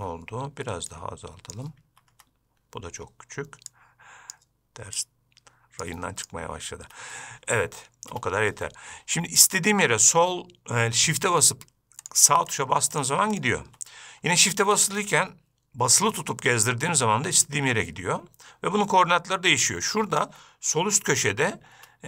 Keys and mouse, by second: 1.2 click, 4.0 click, 5.4 click, 8.4 n, 9.7 shift+middle click, 12.3 shift+click, 12.8 shift+click, 13.2 shift+click, 13.6 shift+click, 15.0 shift+click, 15.0-20.5 shift+right drag, 20.5 shift+click.